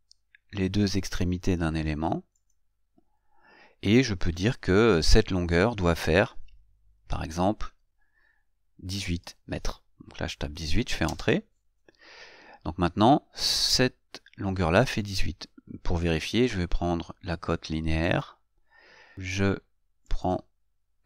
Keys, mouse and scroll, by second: 2.6 click, 18.2 click, 20.3 click.